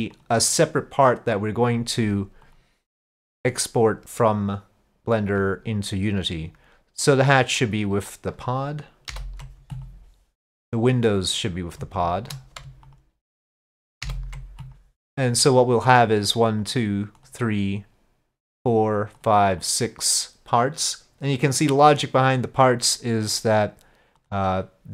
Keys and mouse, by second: 0.2 click, 2.5-5.4 drag, 7.7 ctrl+click, 9.1 ctrl+p, 11.3-11.8 drag, 12.1 shift+click, 12.9 ctrl+click, 14.1 ctrl+p, 16.3-16.7 drag, 17.2 click, 18.6 click, 19.2 click, 19.6 click, 24.3-24.9 drag.